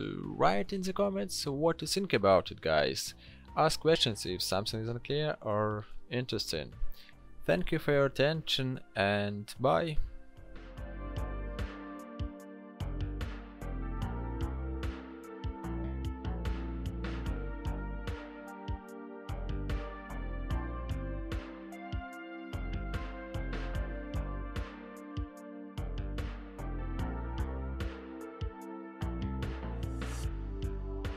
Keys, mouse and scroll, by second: 1.8 ctrl+click, 3.8 l, 27.9 ctrl+g, 28.4 ctrl+j.